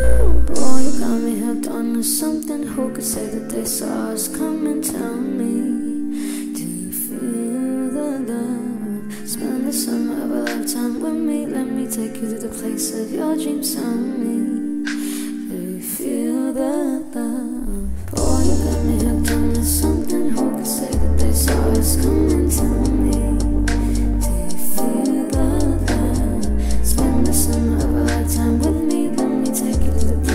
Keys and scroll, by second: 0.3 s.